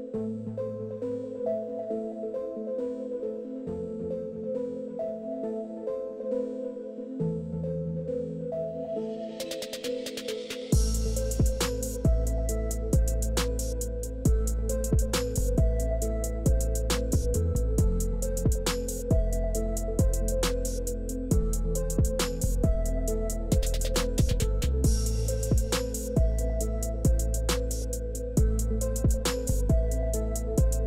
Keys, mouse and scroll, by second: 7.1 shift+click, 7.8 KP_0, 8.0 KP_5, 8.2 Return, 9.4 click, 9.9 KP_0, 10.2 KP_3, 10.3 Return, 11.1 click, 12.1-12.9 middle drag, 13.1-13.7 scroll up 1, 14.2-15.6 shift+middle drag, 15.9 scroll up 2, 16.3-17.3 shift+middle drag, 18.1-18.4 scroll up 3, 18.5 shift+middle click, 18.9 shift+middle click, 19.3 scroll up 2, 19.7 shift+middle click, 20.7 shift+middle click, 21.0 shift+middle click, 21.4 shift+middle drag, 22.2 shift+click, 27.4 shift+click, 29.7 shift+click.